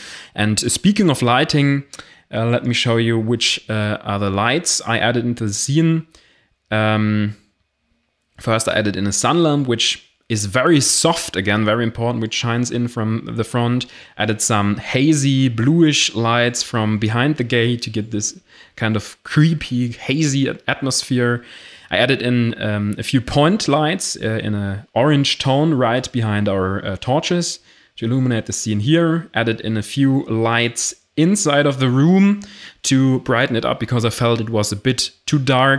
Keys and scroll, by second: 6.9 0, 12.8 0, 29.4 o.